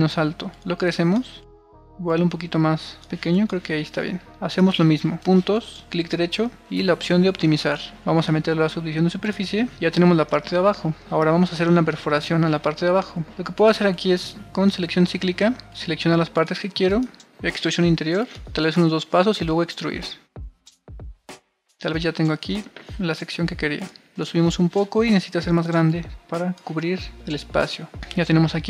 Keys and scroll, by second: 10.0 super+r, 27.2 super+r.